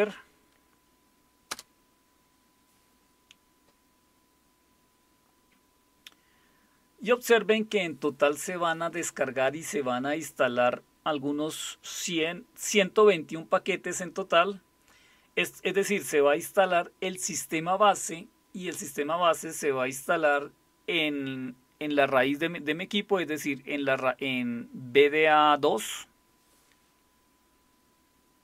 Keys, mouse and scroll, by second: 1.5 Return.